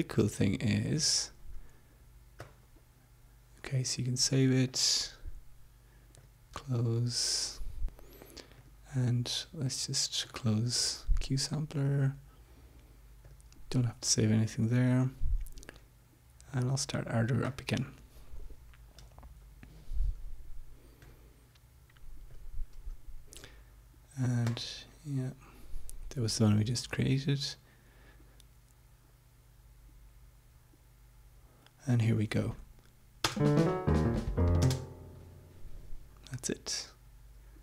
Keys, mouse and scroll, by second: 1.1 click, 2.4 click, 4.7 click, 6.1 click, 9.3 click, 11.1 click, 14.0 click, 17.3 click, 18.3 click, 21.7 click, 23.0 click, 25.1 click, 33.4 Home, 34.0 space, 35.3 space.